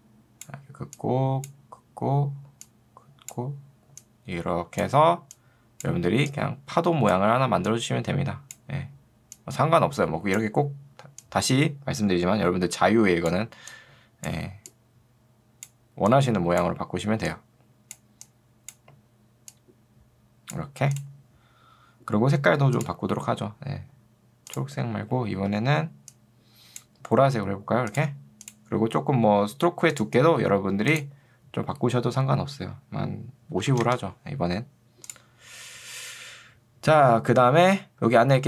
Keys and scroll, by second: 33.7 0, 33.9 Return.